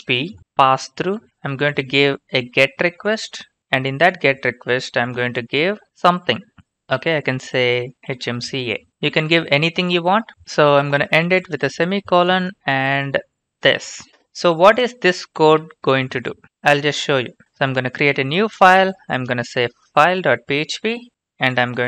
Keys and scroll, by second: 0.0-6.0 typing, 7.7-8.8 typing, 10.0-12.8 typing, 11.2 Down, 15.4 ctrl+c, 16.9-21.4 typing.